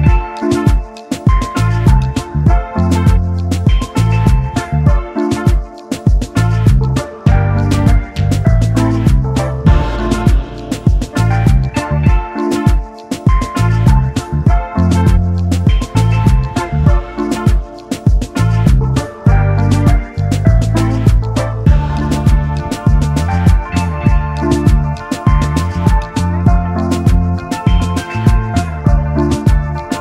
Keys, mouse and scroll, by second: 2.6 Right, 2.7 Right, 4.7 Left, 5.9 shift+click, 8.2 ctrl+g, 9.8 shift+click, 11.5 double click, 12.8 shift+click, 14.6 Up, 14.8 Up, 18.0 alt+scroll down 1, 18.8 alt+scroll, 18.9 double click, 19.7-20.1 alt+scroll down 1, 20.1 double click, 22.5 click, 22.7-23.1 alt+scroll up 1, 24.0 shift+click, 25.8 alt+scroll down 1, 26.5 space, 26.6 double click, 28.1 shift+click, 29.1 alt+scroll down 1.